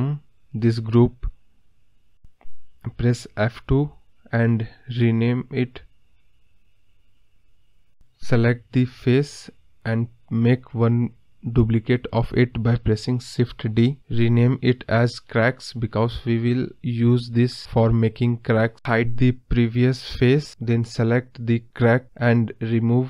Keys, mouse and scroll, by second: 8.4 scroll down 2, 9.6 click, 11.6-13.3 scroll up 2, 13.3 shift+d, 15.0-17.1 drag, 18.0 click.